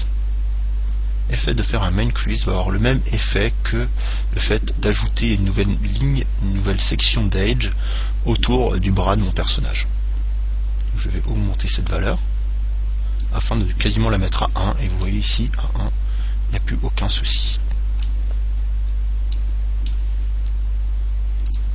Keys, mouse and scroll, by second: 9.9 click, 14.7 Tab, 15.2-17.2 middle drag, 18.9-21.5 middle drag.